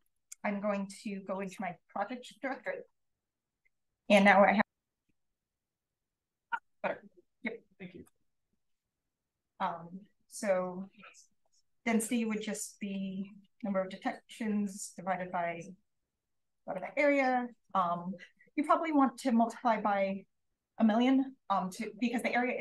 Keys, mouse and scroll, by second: 0.0-1.5 drag, 0.0-1.3 right drag.